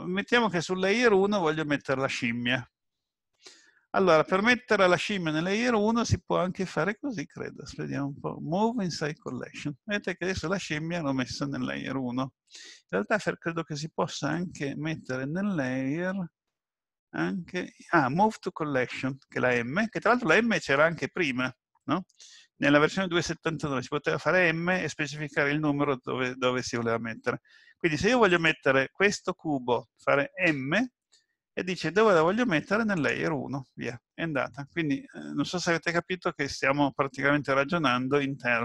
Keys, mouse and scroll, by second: 5.9 click, 14.3 right click, 28.4 click, 30.5 m.